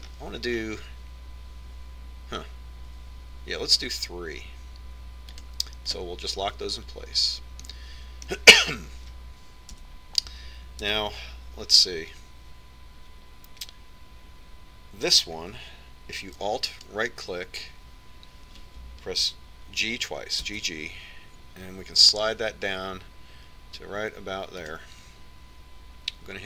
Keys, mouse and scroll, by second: 9.5-11.4 middle drag, 11.6 a, 12.7 KP_1, 18.7-20.5 right drag, 22.3 g.